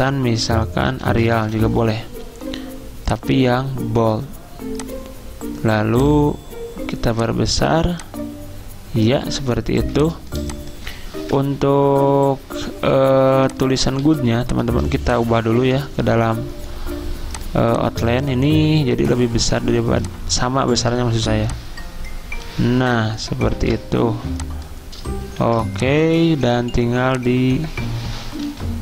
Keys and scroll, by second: 0.9 a, 9.8 z, 13.8-15.7 typing, 23.6 ctrl+g, 25.4 ctrl+g, 28.5 i.